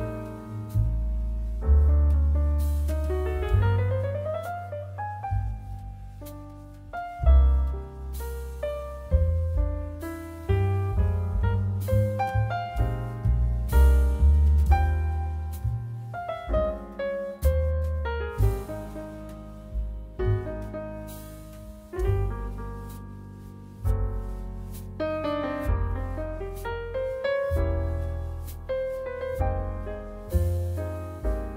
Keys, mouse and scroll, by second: 0.4 Tab, 0.8 click, 0.8 middle click, 0.8 right click, 1.5 shift+click, 1.5 shift+middle click, 1.5 shift+right click, 1.7-3.6 shift+drag, 1.7-3.6 shift+middle drag, 1.7-3.6 shift+right drag, 3.8 3, 5.0 c, 5.9 click, 5.9 middle click, 5.9 right click, 10.1 i, 11.6-31.5 right drag, 12.6 i, 16.3 i, 22.5 Tab, 28.5-31.5 drag, 28.5-31.5 middle drag.